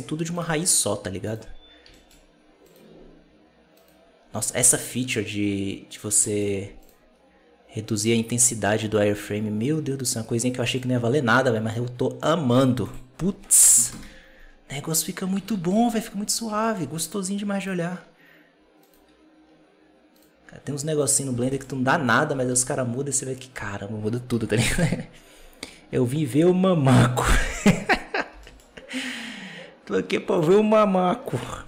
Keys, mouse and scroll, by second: 0.3 right click, 1.2 right drag, 1.4 scroll up 1, 1.8 shift+middle click, 2.0-2.6 scroll up 1, 2.6 right click, 2.8 scroll up 2, 3.7 right click, 4.2-5.4 scroll down 4, 5.4-5.9 scroll up 5, 6.1 shift+middle drag, 6.4-6.7 scroll up 1, 6.7 right click, 7.9-11.0 drag, 15.0-15.4 scroll down 3, 15.4 alt+a, 15.5-15.9 scroll down 3, 15.9-16.5 scroll up 6, 16.5 shift+middle drag, 16.8 scroll up 2, 17.5 right click, 17.7-18.0 scroll down 5, 18.7-19.3 right drag, 19.3 scroll down 3, 20.1 right click, 20.9-21.3 right drag, 21.3 alt+d, 22.2 r, 28.2 g, 31.0-31.3 scroll down 1, 31.3-31.6 shift+middle drag.